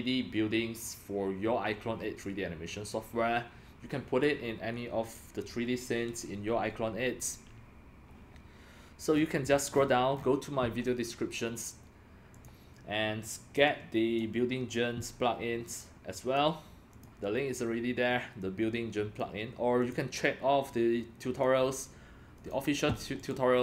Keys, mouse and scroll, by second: 0.9 Escape, 9.1 scroll down 5, 9.7 scroll up 6, 9.8-10.7 scroll, 12.3 click, 13.6 click, 13.8-14.2 drag, 16.2 click, 16.9 click, 18.4 click, 19.8 click, 20.6 click, 22.4 click, 22.9 scroll down 2, 23.2 click.